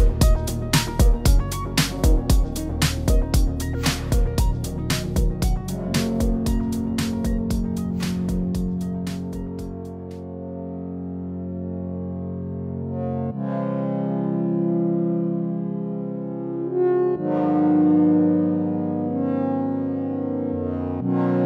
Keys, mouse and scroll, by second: 0.0 click, 0.8 click, 1.0 click, 1.8 click, 2.1 click, 2.4 click, 2.6 click, 3.0 click, 3.4 click, 4.0 click, 4.2-4.8 scroll down 5, 4.4 click, 4.8-5.2 scroll up 5, 6.0 middle click, 6.1-6.7 scroll down 3, 6.8 click, 7.1 Tab, 7.2 middle click, 7.5 scroll up 3, 7.6 shift+middle click, 7.9 click, 8.6-9.1 click, 8.8 click, 9.0 click, 9.4 click, 9.4-9.7 scroll down 2, 9.5 middle click, 9.7 Tab, 9.9 z, 10.5 middle click, 11.0 click, 11.3 click, 11.5 click, 11.8 click, 11.9 middle click, 12.2 click, 12.6 click, 12.7 ctrl+s, 13.7 scroll up 2, 13.8 middle click, 13.9 shift+middle click, 14.0 Tab, 14.2 click, 14.6 ctrl+s, 14.8 click, 15.1 click, 16.5 click, 16.6-17.1 scroll up 3, 16.9 click, 17.2 click, 17.5 click, 18.5 shift+Left, 18.7 shift+Left.